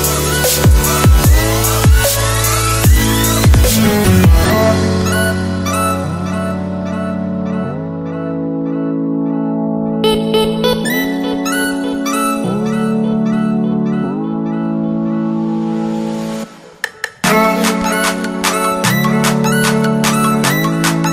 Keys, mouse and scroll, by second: 1.8 alt+Tab, 2.9-4.9 scroll down 1, 4.9 click, 6.9 right click, 7.7 alt+Tab, 9.0 v, 9.5 click, 10.0 Delete, 10.3 click, 10.9 right click, 11.2 click, 11.5 ctrl+t, 12.0 click, 14.9 Down, 15.4 click, 16.5 Return, 16.8 Left, 17.5 click, 18.6 scroll up 1, 19.4 click, 20.0 scroll up 1, 20.3 click.